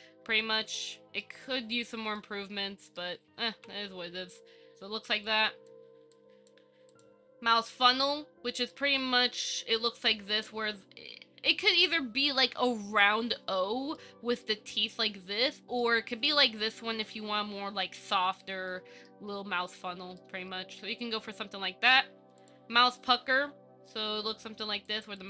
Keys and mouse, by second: 2.4-3.2 middle drag, 3.7 KP_1, 5.4 click, 6.3-6.7 drag, 8.9 shift+middle drag, 10.0 shift+middle drag, 14.1-14.6 middle drag, 15.7 middle click, 16.7 KP_1, 18.9-19.3 shift+middle drag, 20.4-20.7 shift+middle drag, 23.4 ctrl+KP_3, 25.1 click.